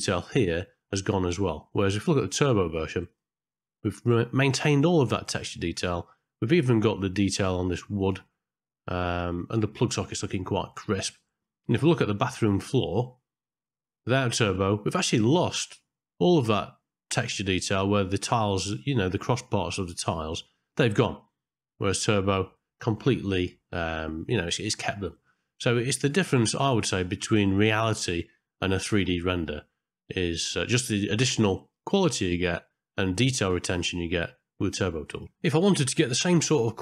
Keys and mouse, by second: 3.2 click, 10.7 middle click, 12.4 middle click, 22.0 click, 24.8 middle click, 35.2 click.